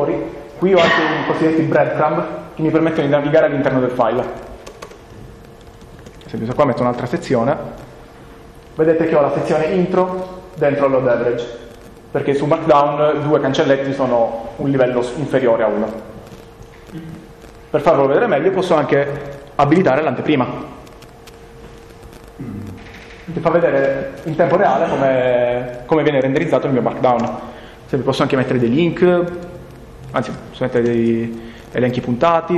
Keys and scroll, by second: 4.7 Return, 6.0 space, 7.2-7.9 typing, 26.4 Return, 30.9-32.5 typing, 31.6 Return.